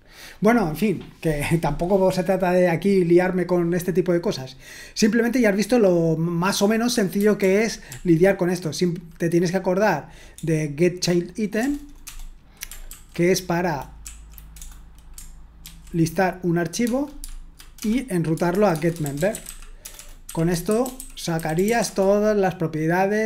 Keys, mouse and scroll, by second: 7.4 ctrl+p, 7.9 ctrl+p, 10.3-11.4 BackSpace, 12.8 ctrl+a, 14.0 Right, 14.6 BackSpace, 15.6 ctrl+e, 16.8-22.1 typing.